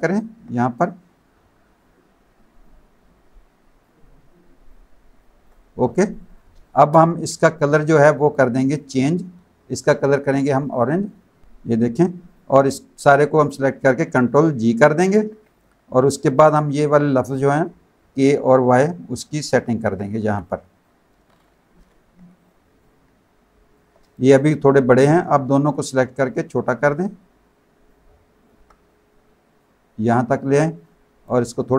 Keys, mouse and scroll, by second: 0.8 click, 2.6 shift+click, 4.7 shift+click, 5.8 alt+z, 5.9 alt+click, 6.5 space, 6.6 click, 8.3 click, 10.6 click, 12.3 click, 15.1 ctrl+g, 15.5 click, 18.2 click, 20.2 z, 20.4 click, 22.4 click, 24.0 space, 24.1 click, 25.1 shift+click, 26.3 alt+shift+click, 27.9 alt+shift+click, 30.4 click, 31.3 click.